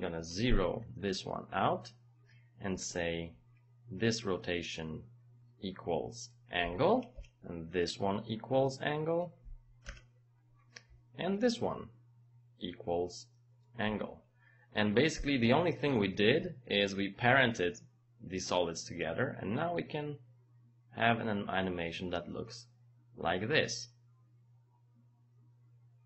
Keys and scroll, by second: 7.1 Return, 9.9 Return, 15.1 Return.